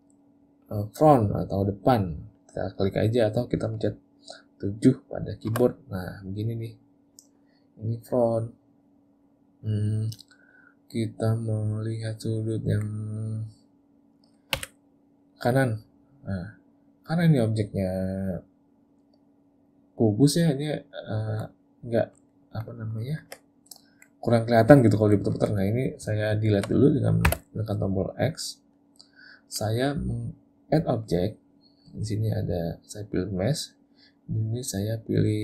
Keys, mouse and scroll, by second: 12.1 middle click, 20.1 click, 21.0 middle click, 22.3 ctrl+middle click, 22.8 ctrl+middle click, 23.1 ctrl+middle click, 23.7 middle click, 24.8 ctrl+middle click, 25.4 ctrl+middle click, 27.3 x, 31.6 click.